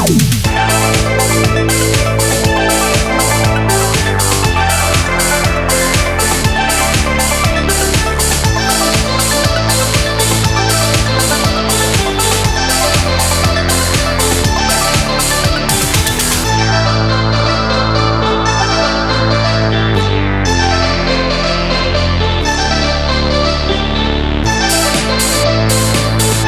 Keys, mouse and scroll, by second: 0.2 Tab, 1.0 super+s, 1.1 KP_7, 1.8 click, 2.4 super+z, 2.4 super+click, 2.4 middle click, 3.4 shift+drag, 3.7 super+z, 3.7 click, 5.8 shift+click, 6.8 click, 6.9 super+z, 8.4 super+z, 8.5 super+z, 8.6 super+z, 8.9 super+z, 9.1 super+z, 9.4 super+z, 10.0 Tab, 10.7 shift+click, 11.3 shift+click, 11.5 shift+click, 12.1 shift+super+z, 12.1 click, 12.9 super+s, 13.8 Tab, 13.9 click, 14.0 KP_7, 14.1 super+z, 14.4 g, 14.6 Tab, 14.9 KP_7, 16.0 click, 16.0 BackSpace, 16.4 shift+a, 17.2 g, 17.5 super+a, 17.7 shift+click, 17.9 x, 18.1 shift+click, 18.6 click, 19.3 super+z, 19.3 click, 20.0 super+z, 20.1 super+z, 20.2 super+z, 20.3 click, 20.5 super+z, 20.5 super+click, 20.8 super+z, 20.9 click, 21.2 click, 21.8 click, 21.8 super+z, 22.3 super+z, 22.4 click, 22.5 super+z, 22.6 KP_3, 22.7 click, 22.8 super+z, 22.9 click, 23.0 super+click, 23.0 super+z, 23.7 KP_7, 24.4 super+z, 24.4 click, 24.6 super+click, 24.6 super+z, 25.1 KP_7, 25.2 super+click, 25.4 super+z, 25.5 click, 25.6 super+z, 25.6 click, 25.9 super+click, 26.0 super+z, 26.4 click.